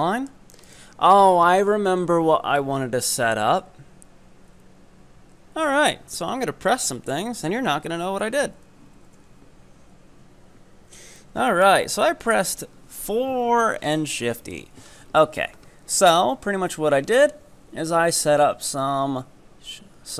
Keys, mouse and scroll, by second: 0.1-0.7 middle drag, 0.7 ctrl+right click, 8.5 4, 8.9 shift+e, 11.2-13.3 middle drag, 13.3-14.0 scroll down 1, 14.0-15.0 middle drag, 15.0-18.1 scroll down 3.